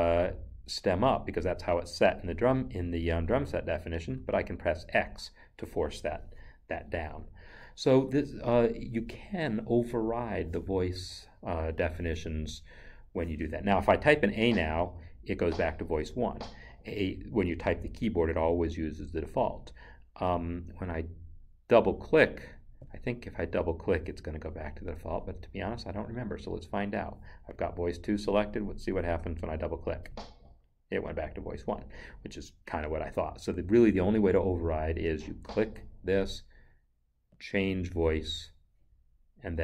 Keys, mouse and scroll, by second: 4.1 x, 14.3 a, 30.0 click, 37.3 click.